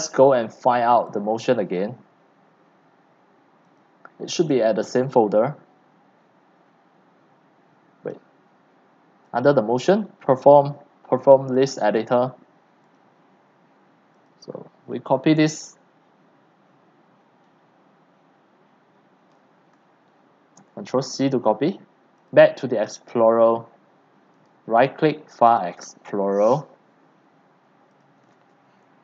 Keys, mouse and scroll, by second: 0.3-0.7 scroll, 0.7-1.4 scroll down 2, 1.4 right click, 1.8 click, 2.0 right click, 3.2-4.5 drag, 4.5 right click, 7.7-20.6 drag, 20.6 ctrl+c, 22.3 click, 24.0-24.7 drag, 26.3 drag, 28.3 ctrl+v.